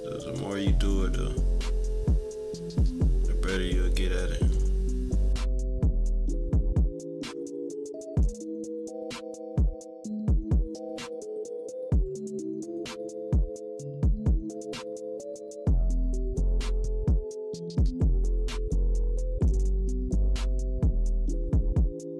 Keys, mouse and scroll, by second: 6.4 -, 6.4 =, 6.7 click, 7.3 click, 7.8 -, 7.9 =, 7.9 scroll up 1, 8.0 click, 8.9 scroll up 1, 9.0 click, 9.7 -, 9.7 =, 9.8-10.1 scroll down 2, 10.0 =, 10.2 click, 10.7 click, 11.1 click, 11.7 -, 11.8 =, 11.9 scroll down 1, 12.1 click, 13.1-14.0 typing, 13.2 scroll down 1, 13.3 click, 13.9 scroll up 2, 14.2 click, 15.2 -, 15.4 =, 15.5 click, 15.9 click, 16.3 click, 16.7 click, 17.3 =, 17.4 click, 18.3 -, 18.9 click, 19.8 -, 20.0 =, 20.3 click, 21.0 click, 21.6 click, 22.1 -.